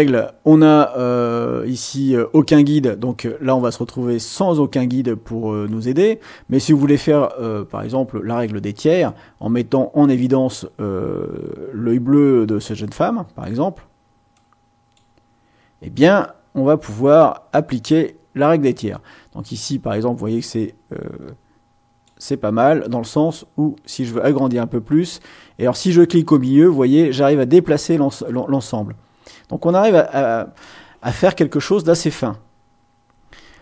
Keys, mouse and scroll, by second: 5.7-7.0 drag, 8.4-13.6 drag, 14.3 click, 16.2-18.9 drag, 19.4-22.2 drag, 22.8-24.3 drag, 24.9-29.9 drag.